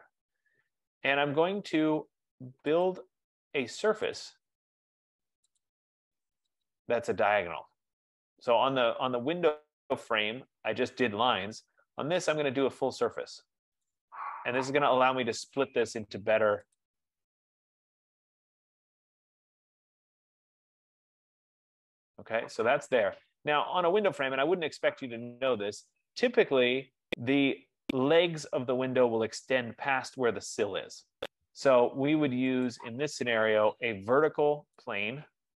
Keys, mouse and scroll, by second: 0.1 middle click, 0.5 middle click, 1.4 middle click, 3.0 click, 4.3 click, 5.3-5.8 scroll, 5.8 click, 7.5 click, 9.3-9.7 scroll, 10.6 scroll, 11.8-12.5 scroll, 13.6-14.0 scroll, 14.3 F15, 15.0 right click, 16.2 click, 16.9 click, 20.3 click, 21.6 click, 22.8 scroll, 23.5-24.0 scroll, 25.5-26.7 scroll, 32.9 click, 35.0 click.